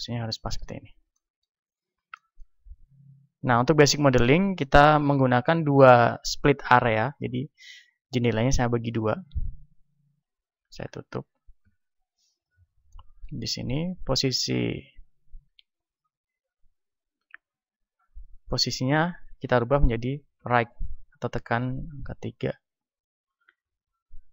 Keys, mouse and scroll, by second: 0.5 z, 8.7-15.3 drag, 10.7 t, 11.7 n, 13.7 n, 15.3 n, 15.9-17.9 middle drag, 17.9-20.5 drag, 20.2 KP_3, 23.5-24.3 middle drag.